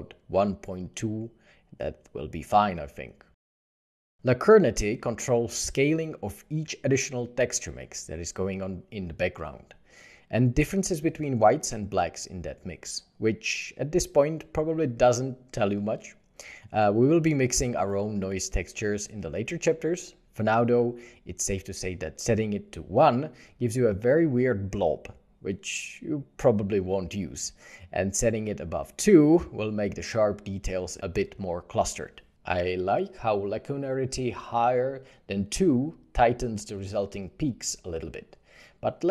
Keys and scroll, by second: 1.1 2, 1.4 Return, 7.0 3, 7.1 Return, 9.5 3, 12.7 1, 12.8 Return, 13.6 1.